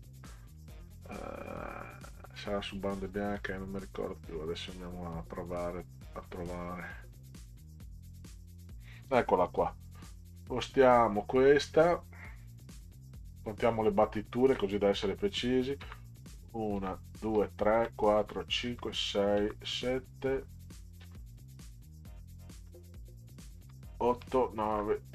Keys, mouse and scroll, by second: 2.3 click, 3.4 click, 4.6 click, 6.2 click, 7.6 click, 15.8 Down, 16.8 Down, 17.3 Down, 17.7 Down, 18.2 Down, 18.7 Down, 19.4 Down, 21.0 Down, 22.6 Right, 23.6 Down, 24.1 Down, 24.7 Down.